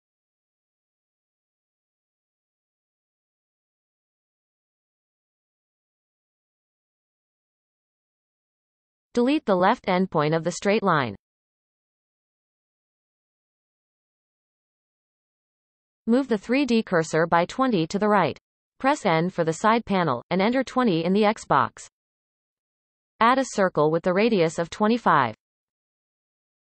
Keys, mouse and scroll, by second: 0.3-2.0 scroll up 6, 0.6 shift+middle click, 1.1 shift+middle click, 1.5 shift+middle click, 2.1 g, 3.2 scroll up 7, 3.5 shift+middle click, 4.2 g, 5.0 b, 5.6 m, 6.3-7.0 scroll down 17, 7.3 scroll down 1, 7.4 e, 8.9 click, 9.3 x, 10.3-10.8 scroll down 3, 11.4 shift+middle click, 12.1-12.4 scroll down 2, 13.1-13.5 scroll down 1, 13.5-16.6 shift+middle drag, 17.4 n, 18.7-21.0 drag, 21.0 shift+middle click, 21.7 shift+a, 23.6-26.3 drag, 26.3 shift+a.